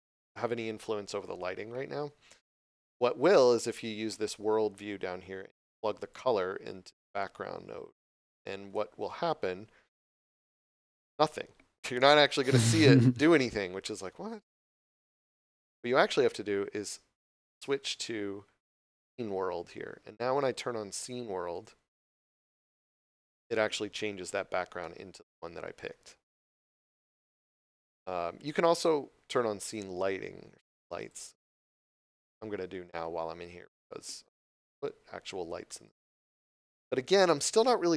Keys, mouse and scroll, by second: 6.1 click, 16.1 click, 21.5 click, 24.2 scroll down 1, 24.8 middle click, 26.9 scroll up 1, 29.6 click, 35.6 middle click.